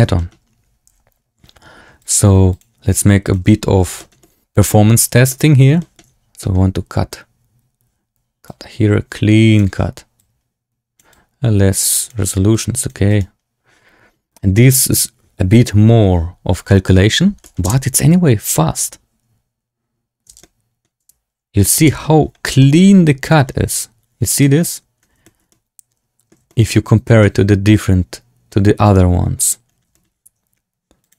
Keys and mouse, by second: 0.1 middle click, 0.8 z, 1.9-2.5 drag, 3.2-3.5 drag, 3.9 shift+click, 4.1 click, 5.2 shift+click, 5.7 shift+click, 6.3 click, 8.4-9.5 drag, 10.1 click, 11.0 click, 12.4 click, 13.0-17.3 drag, 17.3 middle click, 17.5 space, 20.3 space, 20.3-20.7 drag, 20.9 space, 21.9 space, 21.9 z, 22.5 shift+drag, 25.1 shift+drag, 25.4-26.2 drag, 26.4 shift+drag, 27.1-28.4 drag, 29.8 shift+drag, 31.0-31.1 drag.